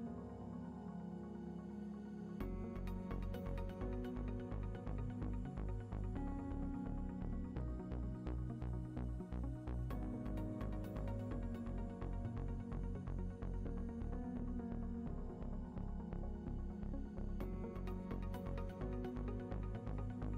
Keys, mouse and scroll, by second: 0.7 ctrl+middle click, 1.3 shift+middle click, 1.9 ctrl+middle click, 2.6 shift+middle click, 6.4 click, 10.8 click, 13.7 ctrl+middle click, 15.2 shift+middle click, 16.0 ctrl+middle click, 17.9 shift+middle click.